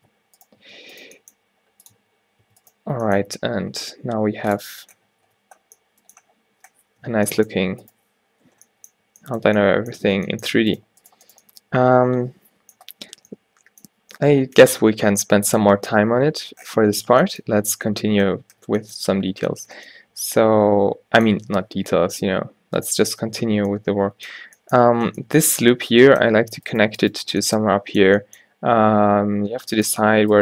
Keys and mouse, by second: 0.0 Tab, 0.7 Tab, 1.1 g, 2.0 Tab, 2.5 Tab, 3.1 g, 4.7 Tab, 5.1 a, 5.4 a, 7.1 -, 7.7 a, 8.5 -, 9.1 a, 10.1 Tab, 10.8 right click, 22.3 o, 26.8-30.4 middle drag.